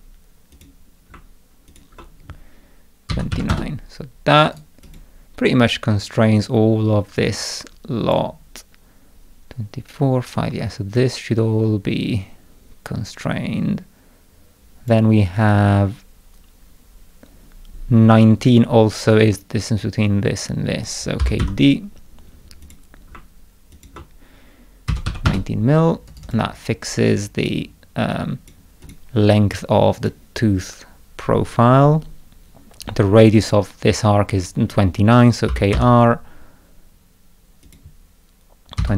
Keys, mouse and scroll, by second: 0.5 click, 1.7 ctrl+click, 4.5 right click, 4.9 click, 7.4-8.1 drag, 11.0-14.9 drag, 21.0-21.9 typing, 22.6 click, 23.7 ctrl+click, 26.1 right click, 26.3 click, 27.1-27.5 drag, 28.1-28.5 drag, 28.8 click, 29.5-30.1 drag, 35.3-36.2 typing, 37.7 click.